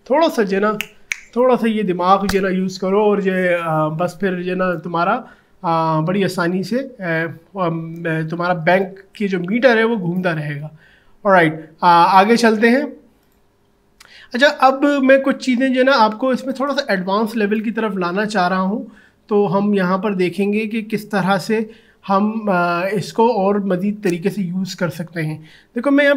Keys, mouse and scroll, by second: 13.2-18.8 drag, 25.9 click.